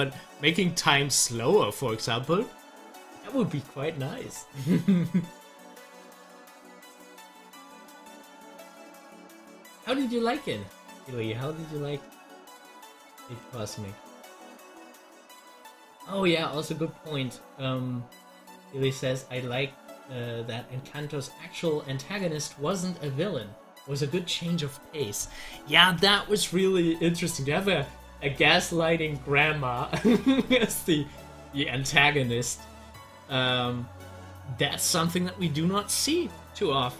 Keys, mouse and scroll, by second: 7.2 scroll down 1, 16.5-22.1 drag, 36.8 scroll up 1.